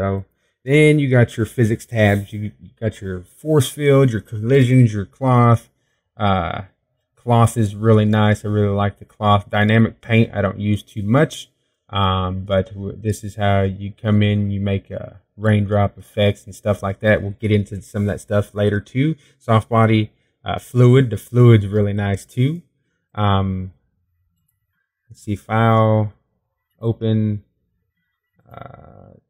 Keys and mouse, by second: 8.7 middle click, 9.4 middle click, 13.0-18.9 middle drag, 20.0 middle click, 24.7 middle click, 25.2-27.6 middle drag, 27.6-29.0 drag.